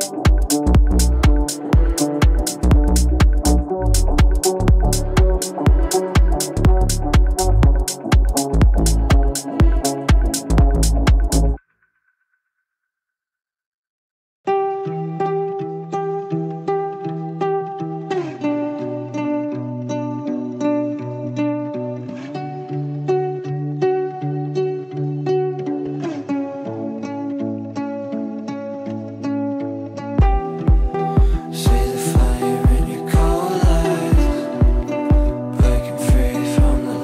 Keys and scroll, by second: 26.6 g.